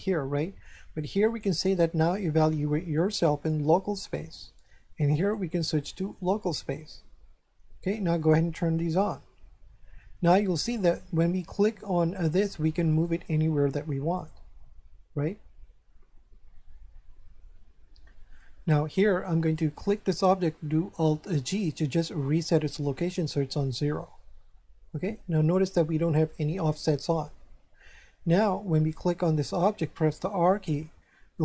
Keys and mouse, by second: 1.2 click, 3.3 click, 5.2 click, 8.1 click, 10.0 shift+middle click, 10.9 right click, 12.9 click, 14.1 right click, 19.9 right click, 21.4 alt+g, 29.1 right click, 30.4 r.